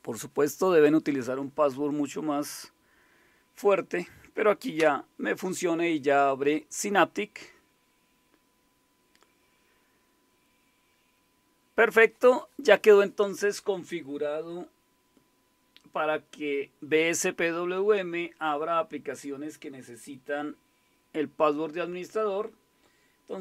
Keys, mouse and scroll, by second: 4.8 Return.